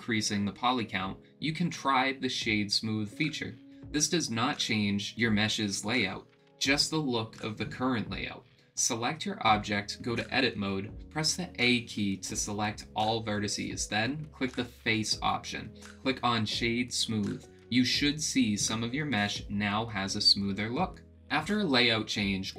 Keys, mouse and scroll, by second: 10.8 click, 14.9 a, 18.4 click, 18.6 Tab, 19.1-22.5 middle drag.